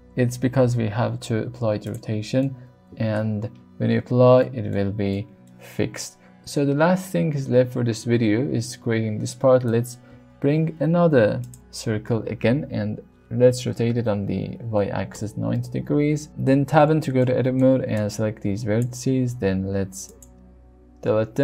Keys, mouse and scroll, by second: 0.9 ctrl+a, 2.4-3.2 middle drag, 4.7-6.0 shift+middle drag, 8.3 middle click, 10.1 shift+a, 13.7 r, 13.9 y, 14.3 KP_9, 14.4 KP_0, 15.2 KP_Enter, 16.3 Tab, 17.2 middle click, 18.1 click, 19.2 x.